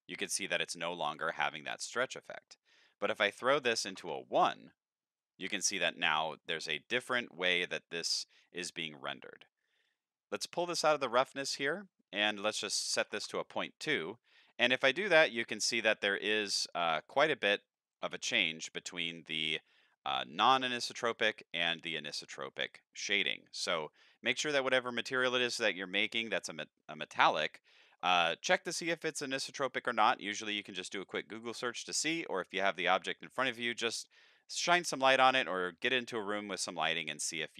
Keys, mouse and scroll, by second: 0.1-0.5 middle drag, 2.8 click, 3.5 click, 6.4 middle click, 9.8-11.1 drag, 12.2 click, 14.8-15.3 middle drag, 17.0-17.4 shift+middle drag, 17.8 middle click, 18.5 middle click, 19.0 shift+middle click, 22.1 middle click, 23.8 shift+middle click, 24.3 middle click, 25.6 middle click, 26.4 middle click, 27.7 shift+middle click, 28.9-29.3 middle drag, 29.6-30.1 middle drag, 30.4 shift+middle drag, 30.9 middle drag, 32.3-32.9 middle drag, 33.2 shift+middle drag, 33.7-34.1 middle drag, 34.9-35.3 middle drag, 35.7 middle drag, 36.4 shift+middle drag.